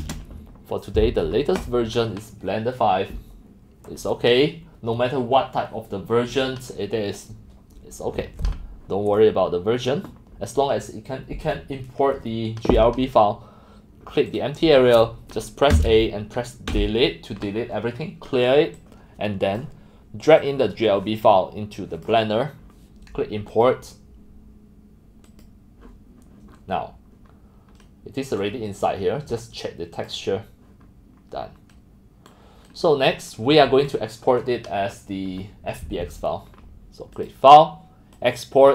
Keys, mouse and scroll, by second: 0.0-0.4 typing, 1.7 click, 3.9 click, 14.4 click, 15.7 a, 16.7 Delete, 18.8 click, 20.4-22.1 drag, 23.7 click, 25.2 click, 26.5 middle click, 26.6-27.4 scroll, 26.8 middle click, 27.3 middle click, 28.4-29.4 middle drag, 29.9 middle click, 30.3 click, 30.8 middle click, 31.6-33.5 middle drag, 35.9-37.6 middle drag, 37.2 click, 37.6-38.0 drag, 38.1 click.